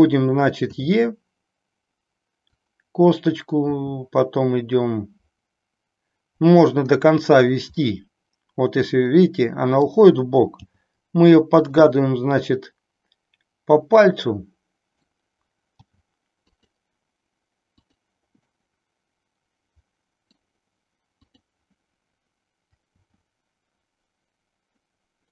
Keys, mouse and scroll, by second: 0.7 e, 2.7 click, 3.7 e, 7.3 click, 7.8-9.8 middle drag, 10.6 g, 12.0-15.1 middle drag, 15.8 g, 17.7 click, 18.4-20.3 middle drag, 21.2 click, 22.9 r.